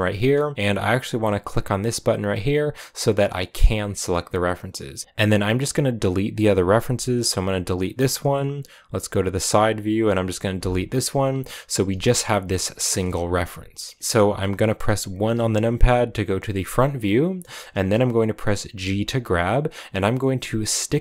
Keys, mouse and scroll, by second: 3.4-5.0 drag, 5.0-5.6 scroll up 2, 7.6 x, 8.9 KP_3, 9.9 right click, 10.5 x, 11.5 right click, 11.8 g, 12.8 KP_1, 13.9 shift+middle click, 14.0-14.6 scroll up 1, 16.7-17.4 scroll up 2, 17.6-18.5 scroll up 2, 18.6 g, 19.3 middle click.